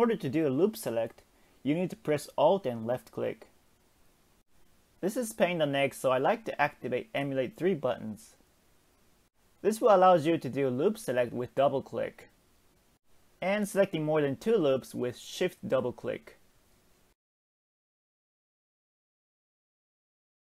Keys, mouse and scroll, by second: 0.1 alt+shift+click, 3.8 click, 5.1-8.4 drag, 13.7 click, 13.9 click, 15.8 click, 15.9 click, 18.1 shift+click, 18.3 shift+click.